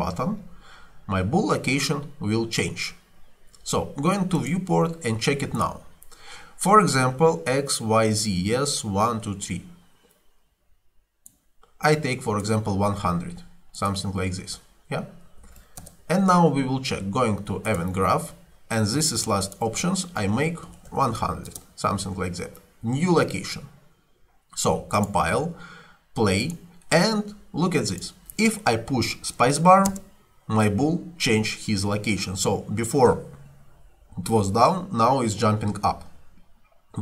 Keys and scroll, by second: 15.5 2, 15.8 Return, 20.7 1, 21.0 0, 21.5 Return, 29.9 space, 35.4 Escape.